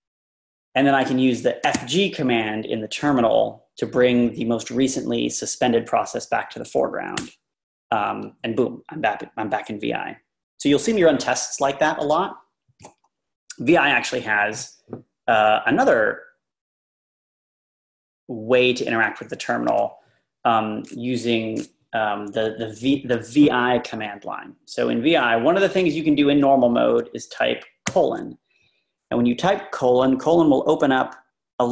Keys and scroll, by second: 1.7 typing, 3.0 typing, 7.4 Return.